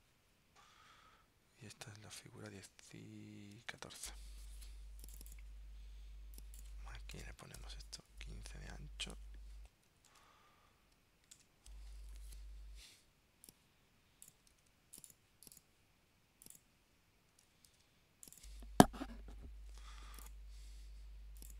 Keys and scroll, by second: 2.6 super+Tab, 3.8 super+Tab, 10.2 super+Tab, 11.4 super+Tab, 14.7 super+x, 17.8 super+v.